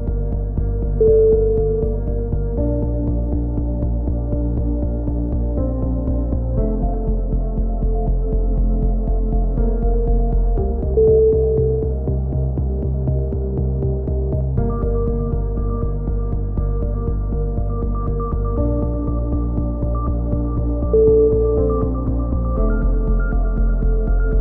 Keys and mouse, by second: 1.2 KP_3, 1.4 z, 2.6 ctrl+r, 3.3-4.7 drag, 4.8 a, 4.9 z, 5.2-6.3 drag, 6.7 click, 7.3-8.9 right drag, 9.6 e, 10.3 right click, 10.4-12.6 drag, 12.6-13.5 middle drag, 13.5 click, 16.3 shift+d, 16.9 f, 18.2 ctrl+i, 18.4 h, 18.7 click, 19.8 KP_3, 20.4 i, 21.3 a, 22.9 KP_3, 23.6 k.